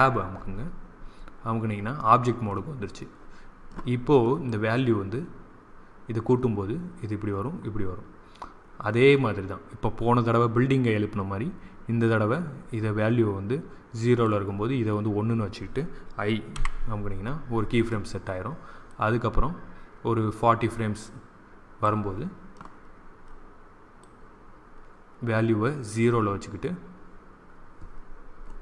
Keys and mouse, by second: 0.3 Tab, 4.3-6.3 drag, 7.4-9.5 drag, 16.5 i, 18.9-20.8 drag, 23.9-27.8 drag.